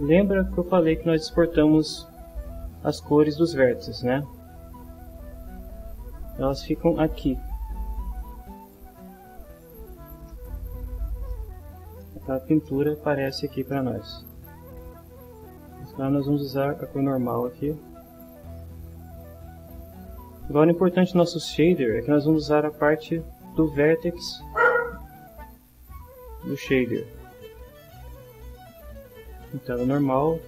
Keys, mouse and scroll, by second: 5.9-9.5 drag, 10.6 middle click, 12.6 ctrl+middle click, 13.7-14.9 ctrl+middle drag, 16.5-18.6 drag, 24.2 click, 25.8-27.2 drag, 28.4 right click, 29.4 click.